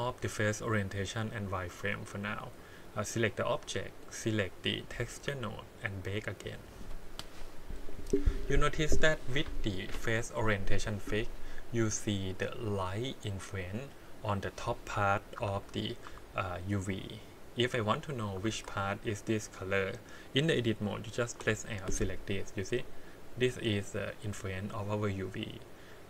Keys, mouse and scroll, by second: 2.3 click, 4.5 click, 4.8 click, 6.0 click, 15.4 Tab, 16.0 a, 18.0 click, 18.4 alt+a, 21.4 l.